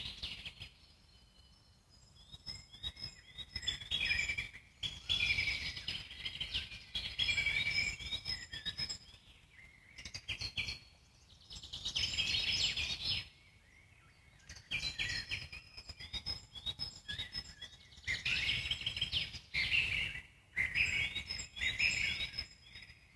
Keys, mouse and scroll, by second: 0.0 ctrl+r, 4.3 ctrl+z, 4.9 click, 5.8 ctrl+r, 8.0 ctrl+r, 11.3 click, 13.5 scroll down 1, 13.8 alt+middle click, 14.3 shift+click, 14.6 alt+middle click, 15.3-15.8 scroll up 2, 22.0 Tab.